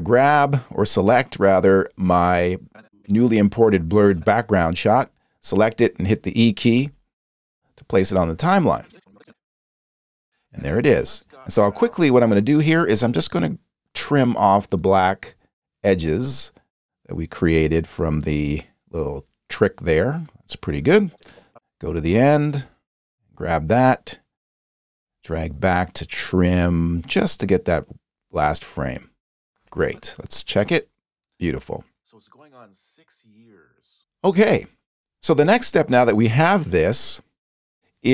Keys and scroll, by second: 6.8 e, 10.1 space, 11.8 space, 30.8 space, 34.0 space.